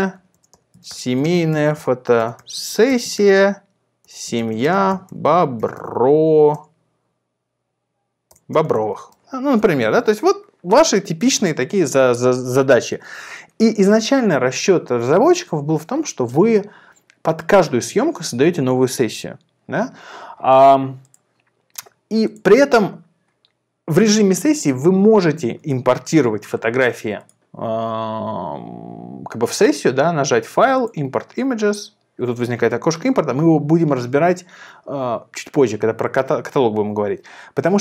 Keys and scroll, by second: 0.0-6.5 typing, 8.2-9.5 typing.